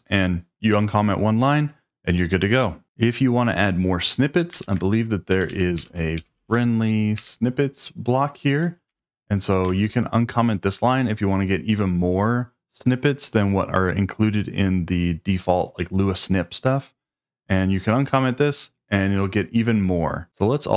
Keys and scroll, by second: 4.6-6.9 typing, 7.1 Return, 8.8 Escape, 9.6 shift+v.